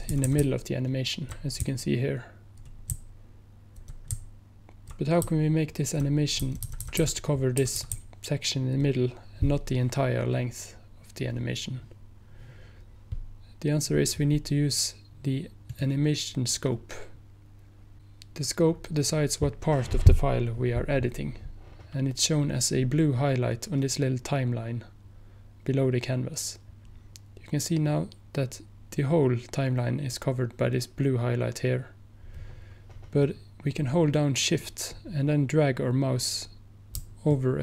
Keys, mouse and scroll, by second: 9.0 Right, 15.7 click, 37.4 shift+click.